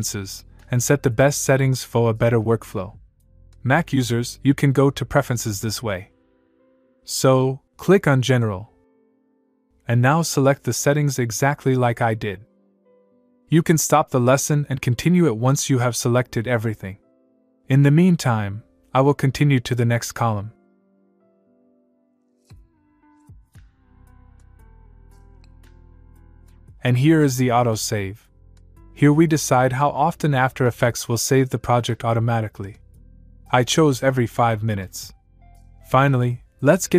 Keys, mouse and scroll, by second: 7.8 click, 13.8-15.2 click, 22.4 click, 36.8 click.